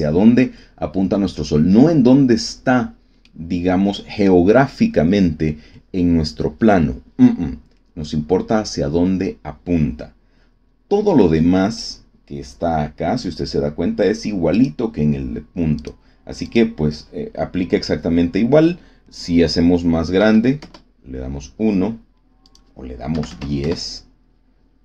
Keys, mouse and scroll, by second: 3.2-3.8 drag, 14.5 click, 15.7 click, 16.4 click, 20.1 KP_1, 20.6 KP_Enter, 22.4 click, 23.0 KP_1, 23.2 KP_0, 23.6 KP_Enter.